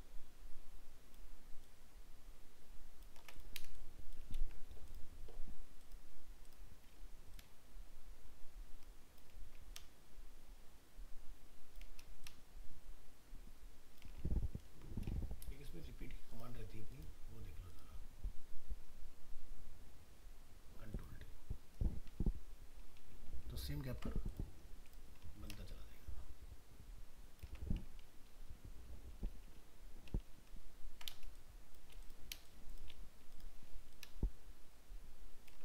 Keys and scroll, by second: 22.3 ctrl+d, 28.1 ctrl+d.